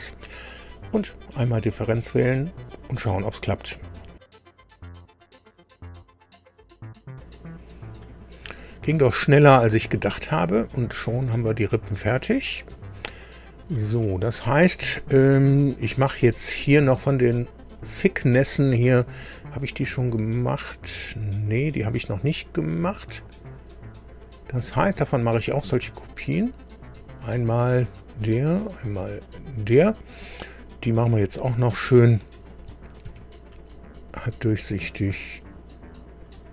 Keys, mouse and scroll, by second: 0.8 click, 9.9 scroll up 1, 10.3-12.9 middle drag, 14.2-14.6 scroll up 1, 15.5 scroll up 1, 17.2 click, 19.3-20.1 scroll down 3, 20.9 scroll up 2, 21.5-22.2 scroll up 4, 26.1 click, 28.2 click, 29.2 click, 30.1 scroll down 2, 31.3 click, 33.1 ctrl+d, 34.2-35.6 drag, 36.2 click.